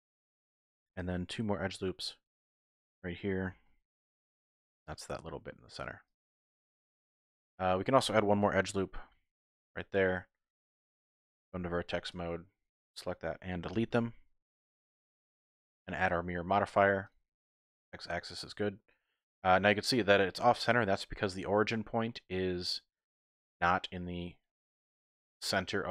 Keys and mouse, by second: 1.5 ctrl+r, 2.6 click, 3.5 s, 3.7 x, 6.1 click, 6.7 shift+click, 9.0 ctrl+r, 9.6 click, 11.1 1, 11.4 z, 12.1 click, 13.7 x, 16.9-17.6 typing.